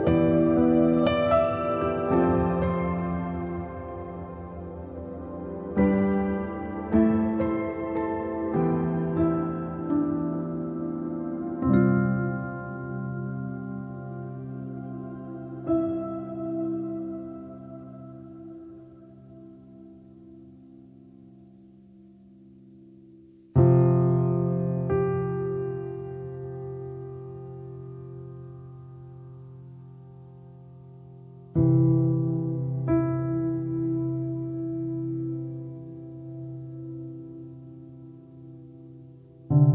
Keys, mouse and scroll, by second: 0.3 shift+middle click, 0.5-0.8 shift+scroll up 2, 0.8-1.9 middle drag, 1.9 click, 2.7 click, 4.2 shift+middle click, 4.8 scroll up 1, 5.1 click, 5.3 click, 5.7 shift+click, 6.5 ctrl+l, 6.8 click, 7.0 click, 7.2 middle click, 8.2 click, 10.3-11.7 middle drag, 11.7-12.3 scroll up 1, 12.3 middle click, 12.3-12.7 scroll up 1, 12.7-16.8 shift+middle drag, 16.8-17.9 drag, 17.9 middle click, 18.3 ctrl+z, 18.6 click, 18.9 click, 19.2 right click, 19.7 click, 20.1-21.3 middle drag, 21.3-23.8 drag, 23.8 middle click, 24.6 ctrl+z, 26.4 click, 26.8-28.0 middle drag, 28.0-29.7 drag, 29.7-31.2 shift+middle drag, 31.2 click, 31.5 shift+middle click, 32.4-33.5 drag, 33.5-33.8 scroll down 1, 33.8 middle click, 34.5 ctrl+z, 34.8-39.5 shift+middle drag, 39.5-39.7 drag.